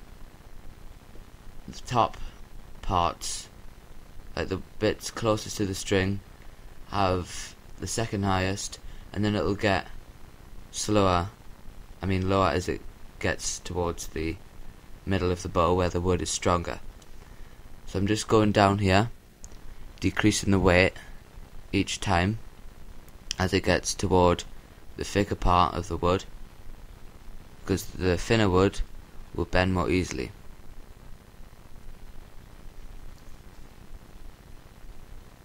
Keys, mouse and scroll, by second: 2.3-4.3 middle drag, 4.3-5.0 scroll up 1, 5.0-7.0 middle drag, 6.4-8.5 drag, 10.7-12.5 drag, 15.1-16.9 drag, 17.9-21.2 drag, 23.3-25.1 drag, 26.9-28.9 drag, 31.2-33.3 middle drag, 33.3-34.5 drag, 35.2-35.4 drag.